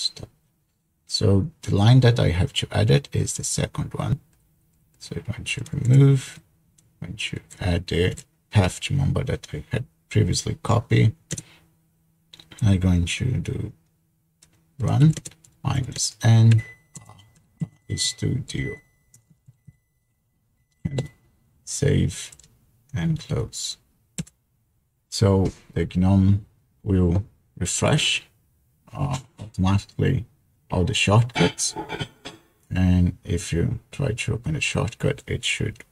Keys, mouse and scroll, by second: 0.0-0.3 typing, 4.1 Right, 4.4 Right, 4.6 Right, 4.8 Right, 5.3-6.8 typing, 8.3 ctrl+v, 11.4 space, 15.2-20.0 typing, 21.0 Escape, 22.3-24.3 typing.